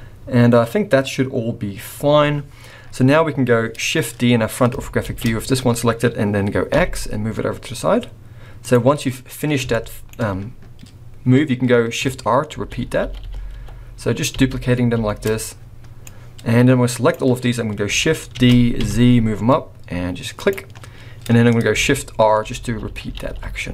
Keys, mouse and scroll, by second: 2.6-3.1 scroll down 4, 3.5-4.0 scroll up 2, 4.0-4.3 scroll down 3, 4.2-5.0 scroll up 3, 5.0 shift+d, 8.9-9.6 scroll down 4, 9.7 shift+middle click, 12.5-14.9 typing, 16.0 click, 18.4 shift+d, 21.1-21.5 scroll down 3, 22.4-23.7 typing.